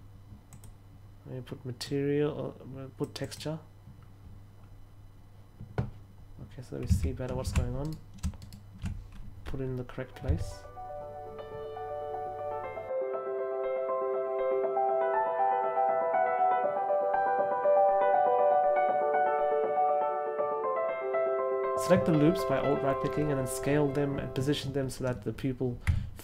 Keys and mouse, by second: 0.4 click, 1.7 click, 3.1 click, 6.8 a, 7.7 alt+right click, 8.4 alt+shift+right click, 10.2 s, 13.1 a, 20.0 alt+shift+right click, 25.8 Tab.